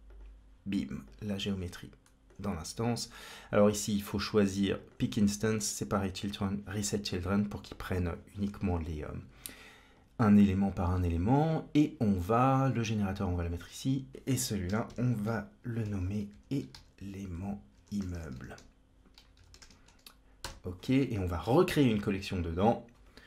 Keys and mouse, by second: 0.9-2.1 drag, 4.6 click, 5.4 click, 6.0 click, 12.5-13.5 drag, 14.0-20.6 shift+drag, 14.1 ctrl+z, 14.1 Escape, 18.0 m, 21.5 c, 22.2 click, 22.5-23.2 drag.